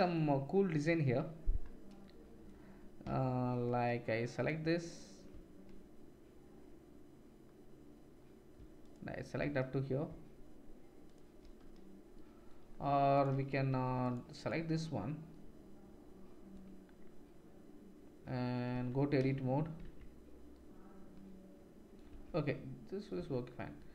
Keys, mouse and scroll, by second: 1.0 Tab, 8.8 shift+middle click, 8.8 shift+right click, 11.0 shift+middle click, 11.0 shift+right click, 13.1 middle click, 13.1 right click, 13.7 ctrl+r, 18.8 Tab, 22.1 Tab, 23.2 Tab, 23.5 click.